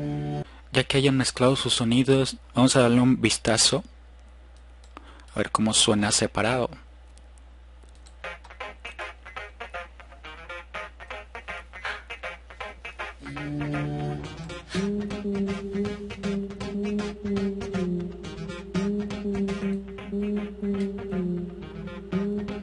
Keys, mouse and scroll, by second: 2.2 click, 4.9 click.